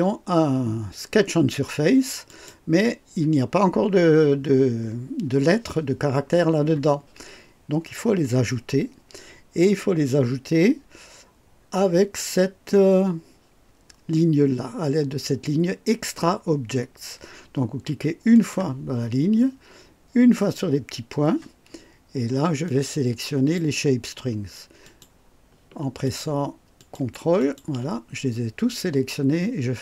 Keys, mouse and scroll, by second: 2.3 click, 12.7 scroll down 1, 18.3 click, 20.3 click, 22.7-23.7 drag, 24.8 click, 26.0 shift+click, 26.8 shift+click, 27.4 shift+click.